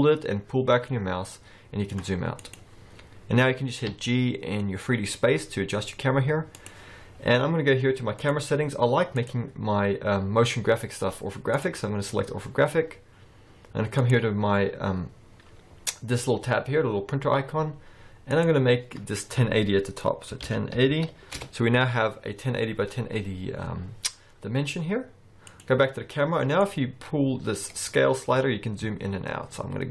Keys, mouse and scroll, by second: 3.9 g, 7.4-8.3 scroll up 3, 8.3 click, 8.3-9.2 scroll up 1, 9.3 click, 12.4-14.1 scroll down 3, 14.1 click, 14.1-14.5 scroll down 1, 18.4 click, 22.6-23.4 scroll down 2, 23.4 scroll down 1, 25.6 click, 26.7 click.